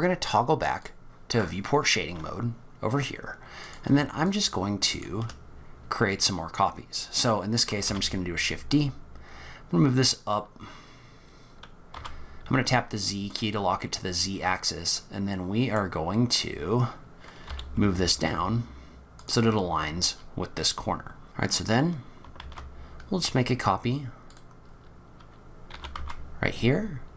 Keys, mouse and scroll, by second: 0.9 click, 3.6 click, 4.3 shift+click, 4.9 shift+click, 7.9 shift+d, 13.6-15.0 scroll up 12, 15.0 middle click, 16.3-17.3 scroll up 1, 17.3 scroll up 1, 17.5 g, 19.5-21.1 scroll down 19, 21.1 scroll down 1, 21.2 click, 21.2 scroll up 6, 22.6 shift+d, 24.7 scroll up 3, 25.7 g.